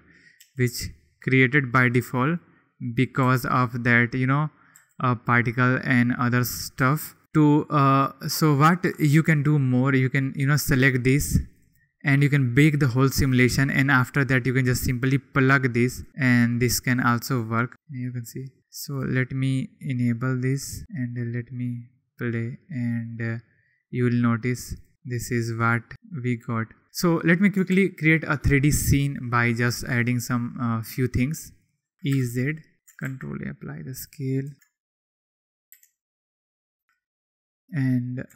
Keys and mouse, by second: 0.3 g, 1.6 click, 3.2 g, 3.9 click, 4.7 g, 5.2 click, 6.0 click, 6.7 g, 7.2 click, 10.1 click, 11.5 click, 14.8 drag, 17.2-17.7 drag, 26.2 click, 27.7 ctrl+s, 31.9 ctrl+z, 31.9 2, 31.9 e, 32.8 Tab, 32.8 g, 32.8 z, 33.0 ctrl+a, 34.5 Tab, 34.7 ctrl+b, 34.7 ctrl+space, 35.7 Tab, 35.7 2, 35.7 e, 35.7 y, 36.7 click.